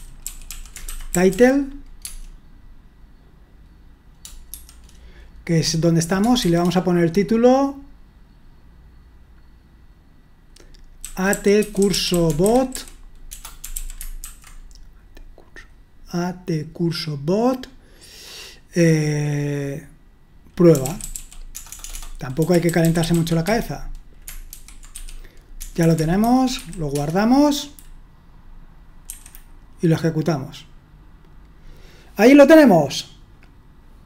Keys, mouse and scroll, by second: 0.0-1.8 typing, 2.0 Tab, 6.4 typing, 11.1-14.3 typing, 20.8-28.7 typing, 29.1 F5.